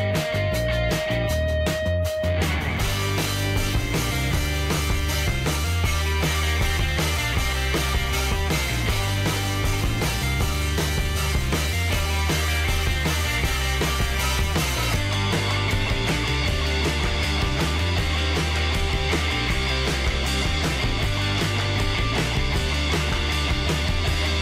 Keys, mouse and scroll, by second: 5.2-9.5 middle drag, 10.0 click, 15.9-18.7 middle drag, 18.6 click, 22.6-24.4 middle drag.